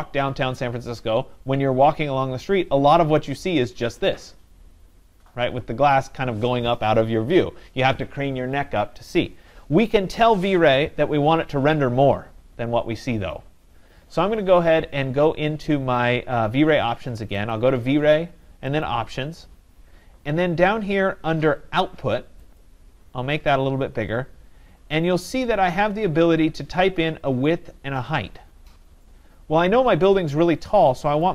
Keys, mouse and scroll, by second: 17.5 click, 18.9 click, 27.4 click.